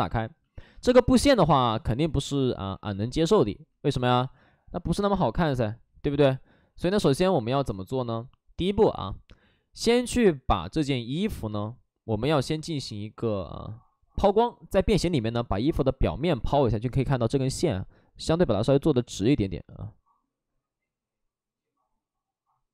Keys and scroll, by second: 0.5 shift+f, 1.6 shift+f, 2.6 ctrl+z, 3.1 ctrl+z, 4.1 shift+f, 5.0 ctrl+z, 6.2 shift+f, 8.9 shift+f, 10.3 ctrl+z, 16.9 ctrl+z.